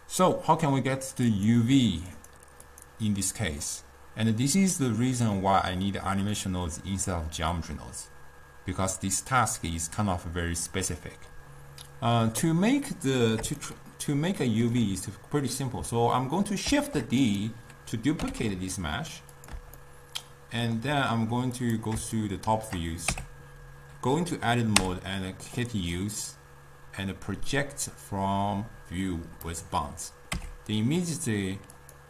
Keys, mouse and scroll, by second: 0.0 click, 1.6 click, 2.4 click, 5.8 click, 13.8-16.8 shift+middle drag, 16.8 shift+d, 19.9-21.8 middle drag, 21.8 click, 22.3-23.2 middle drag, 23.2 Tab, 30.5 Tab.